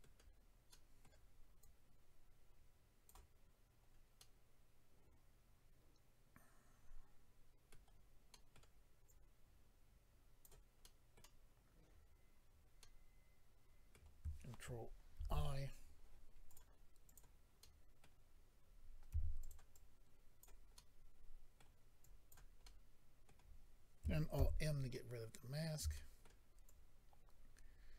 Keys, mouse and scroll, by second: 0.7 middle click, 1.6 click, 3.8-4.2 scroll down 1, 4.2 middle click, 8.3 middle click, 9.1 click, 10.8 middle click, 13.9 middle click, 15.1 ctrl+i, 16.4 click, 16.5 click, 17.0 click, 17.1 click, 17.6 middle click, 19.1 f, 19.5 click, 19.7 click, 20.3 f, 20.7 middle click, 22.0 click, 22.6 middle click, 24.3 alt+m, 24.9 middle click, 25.9 shift+middle click, 26.6 shift+click.